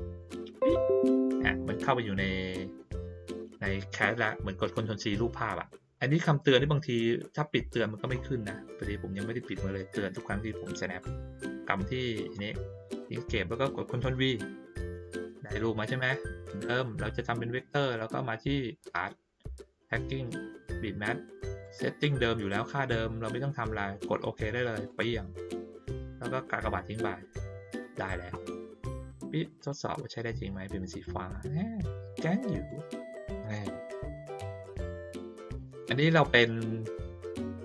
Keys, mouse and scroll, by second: 0.0 click, 11.5 click, 15.0-15.9 drag, 16.9 click, 19.8 click, 21.6-22.0 drag, 24.8 click, 26.6 click, 29.5 click, 31.0-32.6 drag, 33.1 middle click, 33.9 ctrl+middle click, 34.2 ctrl+middle click, 35.0 middle click, 36.2-37.6 drag.